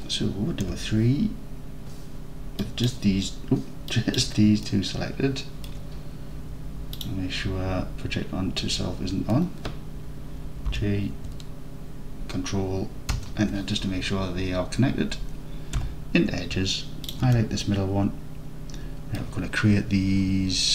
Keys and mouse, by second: 0.7 3, 2.7 click, 3.9 drag, 4.7 alt+middle click, 5.0-5.4 alt+middle drag, 5.6 alt+middle click, 7.2-8.8 drag, 10.7 g, 13.2 ctrl+KP_Enter, 15.8 2, 17.7-19.2 alt+drag.